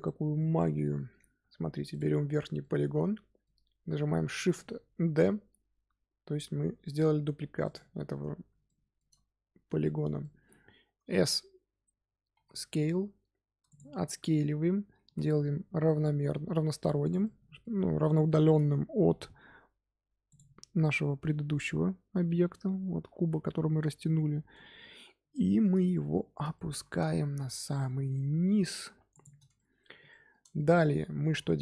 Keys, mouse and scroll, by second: 1.8 click, 2.5-4.3 middle drag, 4.3 shift+d, 8.6-12.0 shift+middle drag, 12.0 scroll up 2, 12.3 s, 14.9 s, 17.2 middle click, 17.7-18.1 scroll up 2, 18.9 s, 24.9 scroll down 2, 25.3-27.2 shift+middle drag, 27.2 g, 29.5-30.8 middle drag, 30.8-31.1 scroll up 1, 31.1 g.